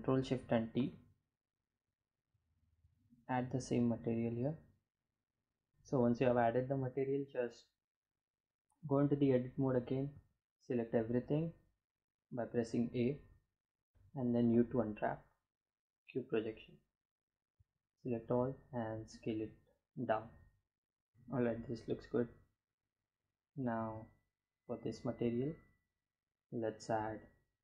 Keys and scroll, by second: 7.1 Tab, 8.5 a, 13.0 a, 13.9 u, 15.9 a, 16.4 s, 20.1 Tab.